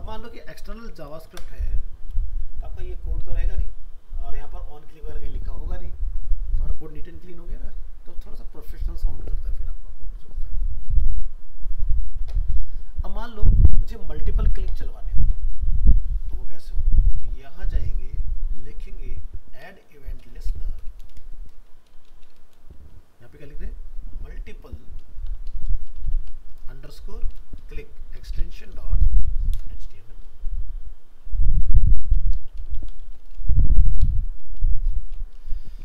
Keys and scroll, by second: 1.3 ctrl+u, 17.4 alt+f.